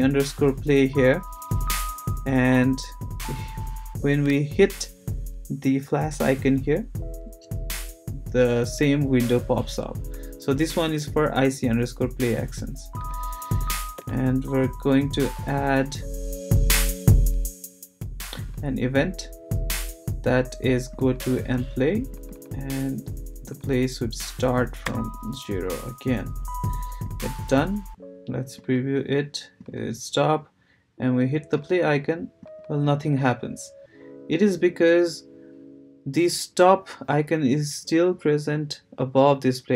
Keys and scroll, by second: 14.0 Return, 24.8 0.